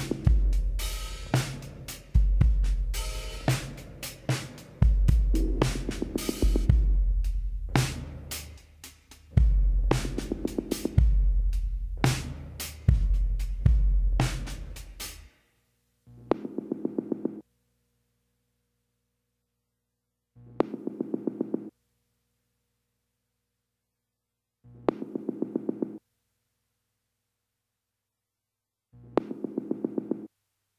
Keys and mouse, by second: 4.9 z, 5.4-8.9 drag, 5.7 z, 10.4 click, 10.8 a, 12.8-15.9 middle drag, 17.2 Tab, 18.7 a, 20.0 KP_Divide, 21.4 a, 24.7-26.2 drag, 26.2-30.2 middle drag.